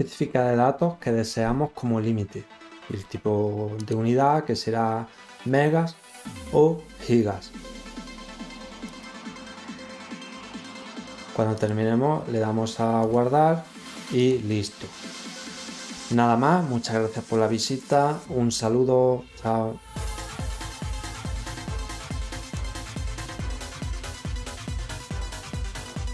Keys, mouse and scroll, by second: 3.7 click, 8.8 click, 11.5 click, 12.9 click, 14.1 click, 14.1 right click, 22.5 click, 24.2 click.